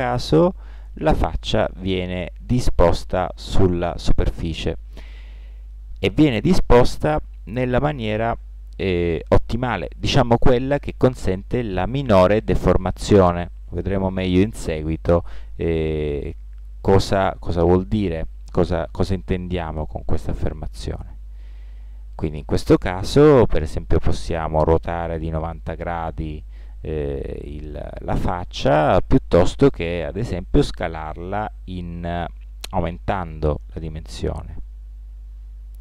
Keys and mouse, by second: 15.2-23.8 drag, 23.8 r, 30.8 s.